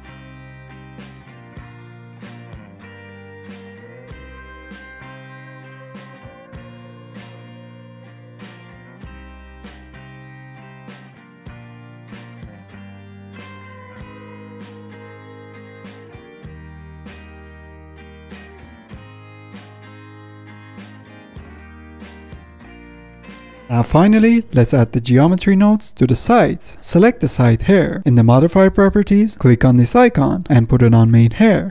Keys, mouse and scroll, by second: 0.0 drag, 0.2 middle drag, 0.3 scroll up 5, 0.4 middle click, 0.4 scroll down 2, 0.5 middle click, 0.5-2.2 drag, 2.3 click, 3.0 f, 3.1-3.5 drag, 3.5 middle click, 3.6-5.0 drag, 5.0 middle click, 5.2 click, 5.4 ctrl+z, 5.5 click, 5.8 middle click, 5.9 scroll down 1, 6.0-7.7 drag, 7.7 middle click, 8.0 click, 8.1 middle click, 8.2 click, 8.4 middle click, 8.4 click, 8.7 ctrl+z, 8.8 click, 8.9 ctrl+z, 9.2 click, 9.3 ctrl+z, 9.8 middle drag, 9.9 click, 10.2 middle click, 10.4 scroll down 2, 10.4 click, 10.9 shift+middle click, 11.1 click, 11.3 middle click, 11.4 click, 11.5 shift+middle click, 11.7 scroll up 1, 11.7 click, 11.9 middle click, 11.9 ctrl+z, 12.0 f, 12.1 middle click, 12.3 click, 12.6 scroll up 1, 12.6 shift+middle click, 12.9 click, 13.4 shift+middle click, 13.8 click, 14.1 middle click, 14.1 click, 14.2 middle click, 14.4 ctrl+z, 14.5 middle click, 15.0 click, 15.0 middle click, 15.3 click, 15.3 middle click, 15.5-16.5 drag, 16.5 middle click, 16.6 ctrl+z, 16.8 middle click, 16.9 click, 17.2 middle click, 17.4 click, 17.5 z, 17.6 shift+middle click, 17.9-18.4 drag, 18.4 middle drag, 18.5-18.8 drag, 18.8 shift+middle click, 19.1-21.2 drag, 19.6 middle drag, 21.2 middle click, 21.3 scroll up 1, 21.3 click, 21.4 middle click, 21.5 click, 21.9 shift+middle drag, 22.1 drag, 22.4 scroll down 1, 22.5 middle drag, 22.6 click, 22.7 middle drag, 22.9 click, 23.0 middle drag, 23.1-23.6 drag, 23.6-25.5 middle drag, 25.5 ctrl+s, 25.9 click, 28.2-31.7 drag.